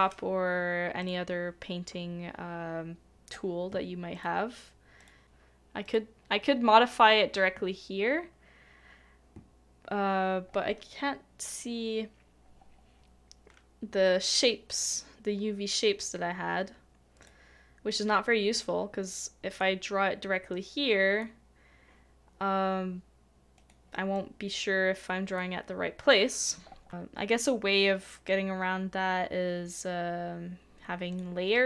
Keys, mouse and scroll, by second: 5.0 typing, 5.2 double click.